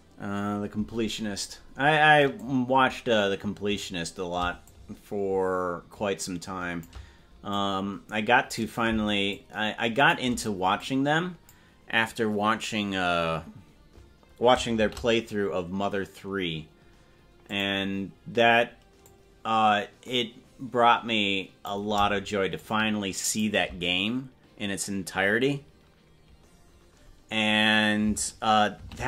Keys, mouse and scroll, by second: 2.4-4.0 drag, 4.7-7.0 shift+drag, 7.6-8.7 drag, 9.3 shift+click, 10.8 click, 16.0 shift+d, 19.1-21.8 drag, 22.6 shift+click.